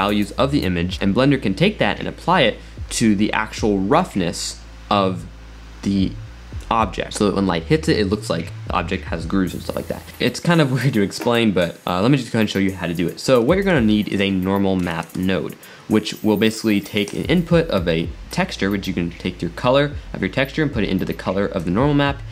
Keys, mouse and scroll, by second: 10.2 click, 12.1-13.6 middle drag, 13.6 shift+a, 18.4 click, 20.3-21.2 drag.